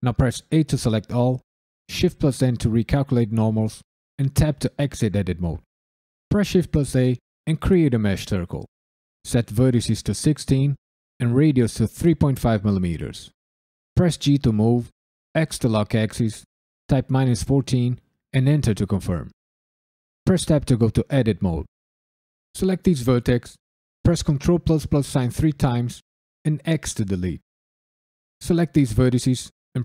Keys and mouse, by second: 0.5 a, 2.4 shift+n, 4.3 Tab, 6.3 shift+a, 9.1-12.7 drag, 14.2 g, 15.3 x, 16.8 KP_Subtract, 17.4 KP_1, 17.8 KP_4, 18.3 KP_Enter, 20.2 Tab, 22.4 click, 24.7 ctrl+KP_Add, 25.0 ctrl+KP_Add, 25.3 ctrl+KP_Add, 26.4 x, 27.8 click.